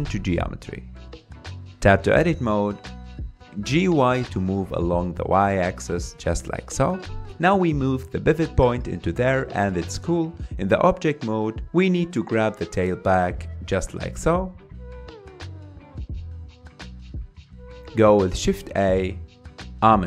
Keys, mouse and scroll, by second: 2.2 Tab, 3.3 a, 4.4 g, 7.3 Tab, 10.4 r, 10.6 g, 16.6-17.0 scroll up 3, 17.0-17.6 shift+middle drag, 17.6-18.8 scroll down 4, 19.0 shift+a.